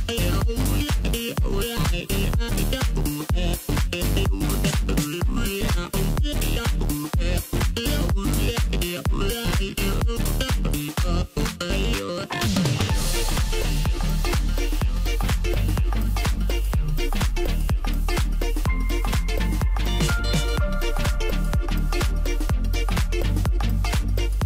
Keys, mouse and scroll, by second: 1.0 click, 2.2 click, 2.4-3.5 middle drag, 3.5 click, 4.0 middle click, 4.6-5.0 scroll up 1, 5.0-6.3 middle drag, 6.3 i, 9.5 click, 10.1-13.1 middle drag, 13.2-15.0 drag, 15.0 KP_1, 15.5 scroll up 3, 16.3 s, 17.5 s, 18.5-18.8 scroll down 2, 18.8 middle click, 19.6-21.0 scroll up 2, 21.0 e, 24.1 scroll down 3, 24.3-24.4 middle drag.